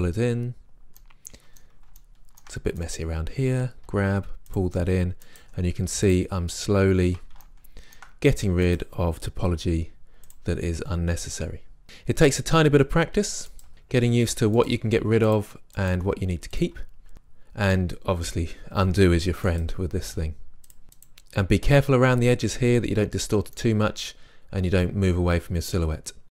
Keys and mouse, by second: 3.9-5.3 drag, 3.9 g, 5.5 g, 7.1 click, 7.5 middle click, 7.8-10.4 drag, 9.6 g, 10.5-12.7 drag, 12.2 g, 13.0-15.4 drag, 14.8 g, 15.7 click, 15.9 g, 16.6 g, 17.3 middle click, 18.7-19.4 drag, 19.1 g, 19.4 right drag, 19.7-20.3 drag, 20.4-21.0 right drag, 20.5 g, 22.0-23.0 drag, 23.6-25.0 drag, 25.0 middle click.